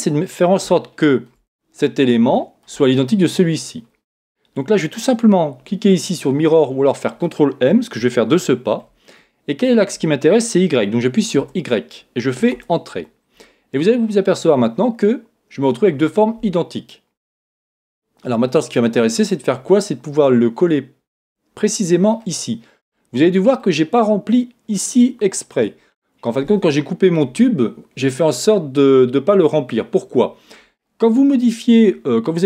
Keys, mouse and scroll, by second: 0.7-5.4 middle drag, 5.4-8.6 scroll down 1, 8.6 ctrl+m, 14.1 click, 17.1-32.4 middle drag.